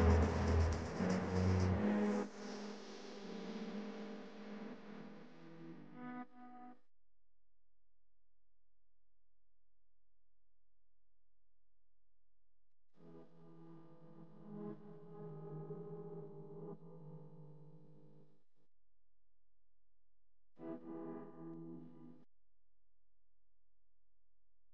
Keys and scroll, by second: 11.2-12.7 typing, 18.1 space, 19.0 space.